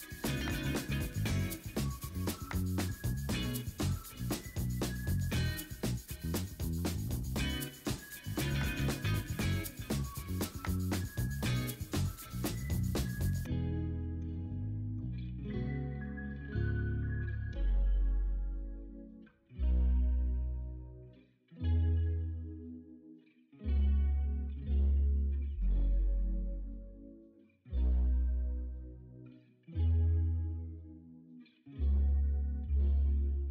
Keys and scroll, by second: 0.6 Return, 0.9 ctrl+t, 1.7 v, 2.9 ctrl+a, 4.5 ctrl+d, 4.7-6.1 typing, 7.5 ctrl+d, 10.7-11.2 typing, 11.1 Return, 11.8 ctrl+x, 11.9 ctrl+z, 12.1 ctrl+shift+i, 12.2 ctrl+x, 12.4 ctrl+w, 13.4 ctrl+v, 13.6 ctrl+t, 15.1 v, 15.6 v, 15.7 ctrl+t, 16.8 v, 17.3 ctrl+t, 18.4 v, 18.9 ctrl+a, 21.1 ctrl+z, 21.2 ctrl+d, 21.4-22.1 typing, 21.9 ctrl+d, 22.9 ctrl+alt+z, 23.0 ctrl+alt+z, 23.3 v, 23.7 ctrl+d, 23.8 e, 25.4 ctrl+u, 28.1 Return, 28.4 v, 30.2 ctrl+t, 31.0 v, 33.2 ctrl+t.